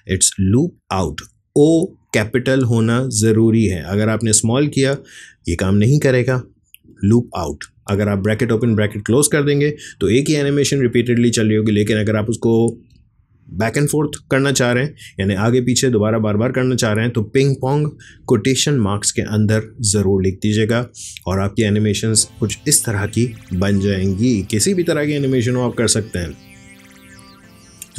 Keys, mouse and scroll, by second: 21.6 click, 22.4 space.